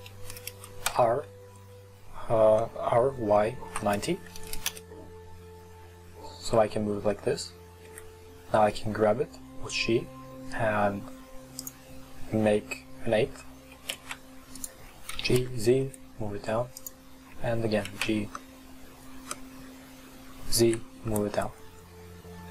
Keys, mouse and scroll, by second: 0.9 r, 6.0-6.9 scroll up 4, 7.9 g, 13.4-13.8 scroll down 1, 13.8 right click, 14.0 shift+d, 15.2 g, 16.1-17.2 right drag, 17.2 scroll down 2, 18.0 shift+d.